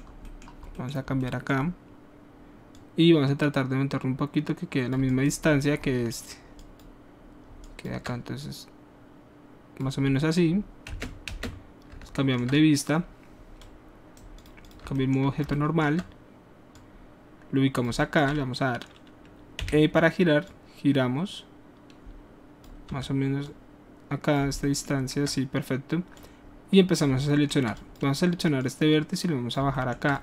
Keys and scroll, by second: 11.0 space, 11.3 space, 19.6 e, 23.0 w.